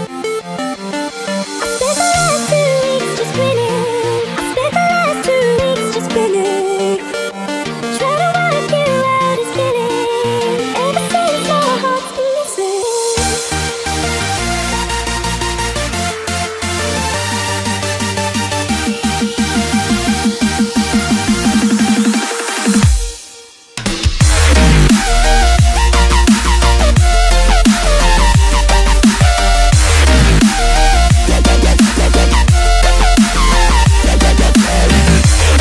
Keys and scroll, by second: 0.0-2.7 typing, 3.8-8.4 typing, 8.5 ctrl+0, 9.9 ctrl+space, 10.7 space, 11.6 n, 14.6 space, 16.1 space, 16.5 8, 26.3 z, 29.0 space, 31.8 space, 33.1 Escape, 33.9 space.